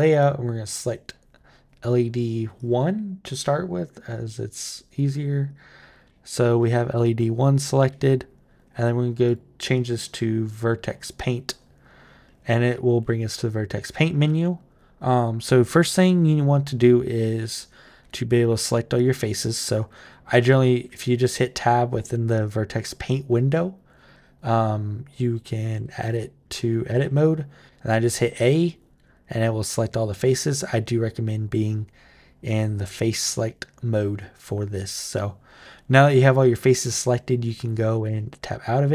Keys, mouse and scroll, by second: 0.0 click, 2.4 click, 3.9 click, 5.3 click, 9.0 click, 10.7 click, 17.9 Tab, 18.7 click, 20.2 Tab, 20.6 Tab, 21.9 Tab, 23.7 Tab, 25.6 Tab, 25.8 Tab, 26.7 a, 37.7 Tab.